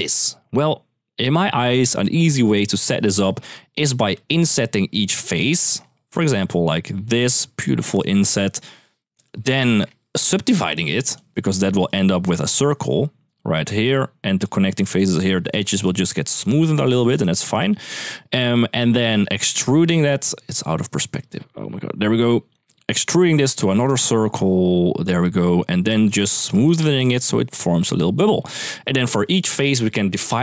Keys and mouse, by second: 1.7 shift+middle click, 2.5 shift+middle drag, 3.9-10.0 typing, 4.1 click, 5.5 click, 7.8 click, 9.5 click, 11.4-14.2 d, 14.6-17.3 d, 14.7 click, 17.3 click, 18.7-21.5 middle drag, 21.7-22.8 d, 22.3 click, 22.9-24.7 d, 24.8 click, 25.2-28.1 d, 25.6 click, 29.5 d.